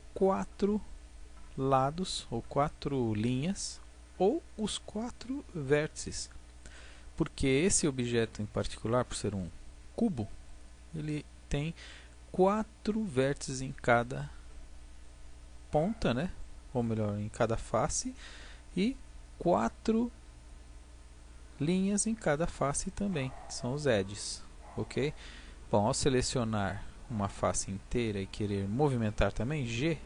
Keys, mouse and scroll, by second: 10.5-12.1 middle drag, 12.1 click, 24.7-26.8 drag, 29.7 g.